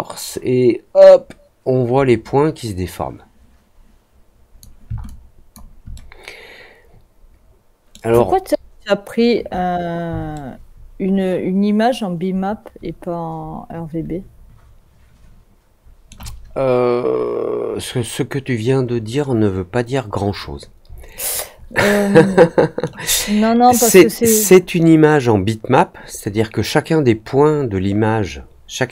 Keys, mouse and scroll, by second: 5.0 alt+click, 5.9-7.9 alt+middle drag, 10.3-16.0 alt+middle drag, 21.1-22.8 alt+middle drag.